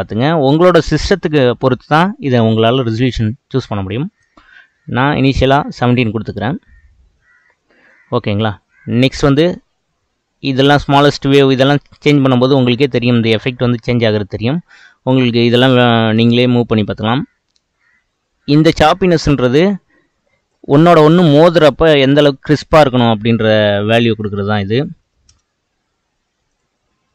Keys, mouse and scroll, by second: 0.3-3.0 middle drag, 3.0-6.1 drag, 7.3-7.7 scroll down 2, 11.2-14.3 drag, 16.3-19.4 drag, 22.0-23.9 middle drag, 23.9-27.1 drag.